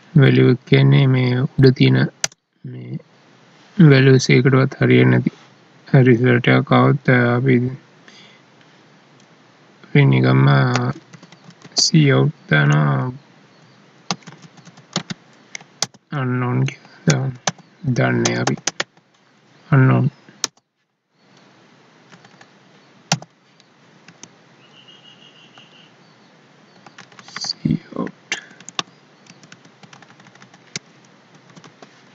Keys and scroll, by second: 14.1 space, 19.3 Right, 22.1 ctrl+Left, 23.8 Right, 26.9 ctrl+Left, 28.3 Right.